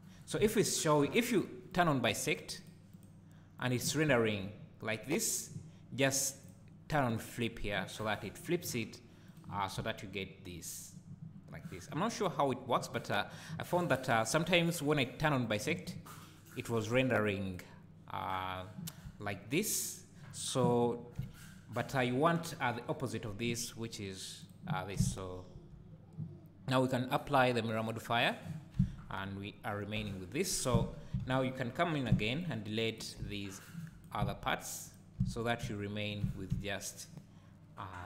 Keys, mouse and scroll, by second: 1.7 click, 2.3 click, 2.6 click, 2.9 click, 3.6 click, 4.1 `, 6.4 click, 7.1 click, 8.0 `, 9.3 click, 9.8 `, 15.4 click, 17.5 click, 18.2 click, 19.0 `, 24.4 click, 25.0 `, 28.2 click, 28.8 Tab, 30.0 KP_7, 30.7 z, 31.2 alt+a, 32.1 b, 34.2 x, 35.2 z, 36.2 Tab.